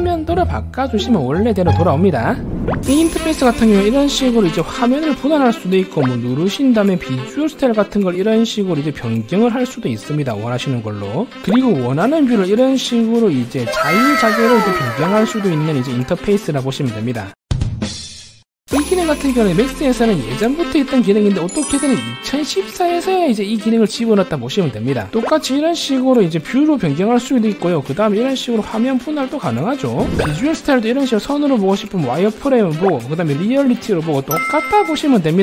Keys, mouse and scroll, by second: 0.0 click, 0.9-1.5 scroll up 4, 5.0 click, 8.5 click, 9.9 click, 13.6 click, 14.8 click, 15.9 click, 21.1 click, 25.3 click, 26.6 click, 27.6 click, 28.1 alt+w, 28.8 click, 29.1 click, 29.4 click, 29.7 click, 30.8 click, 31.9 click, 33.4 click, 33.9 click.